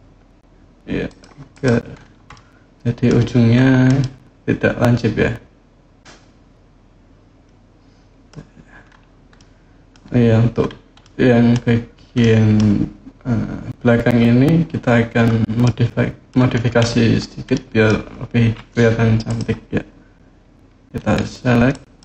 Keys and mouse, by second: 0.8 click, 1.3 click, 2.1 click, 3.8-8.1 middle drag, 9.1 middle click, 10.8 click, 12.0 click, 15.4 click, 17.3 middle click, 21.5 click.